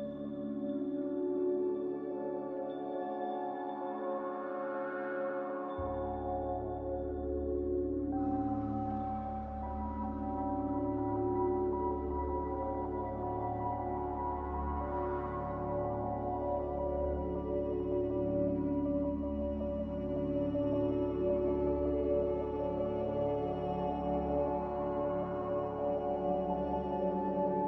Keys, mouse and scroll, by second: 0.4 5, 0.9 Return, 6.3 z, 8.9-9.8 typing, 17.8 z, 18.8 Delete, 19.7 ctrl+z, 25.9 a.